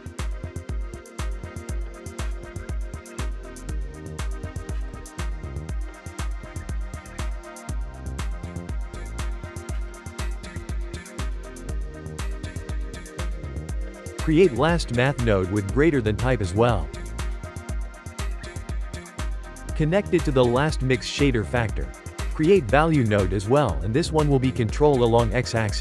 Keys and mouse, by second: 0.0 click, 0.1 g, 0.7 click, 2.7-4.5 ctrl+middle drag, 4.5 click, 6.1 ctrl+shift+click, 7.5 g, 8.4 click, 8.7 g, 11.2-13.3 ctrl+middle drag, 13.6 shift+a, 14.1 BackSpace, 17.1-17.8 shift+middle drag, 19.1-19.9 drag, 21.3 shift+middle click, 21.9 shift+a.